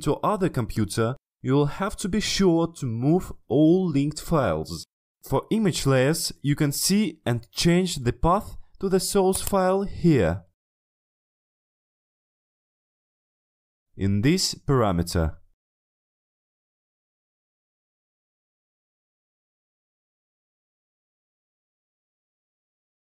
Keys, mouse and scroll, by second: 8.0 click, 9.4 click, 12.7 click, 13.5 click, 17.3 click, 18.2 click, 20.8 click.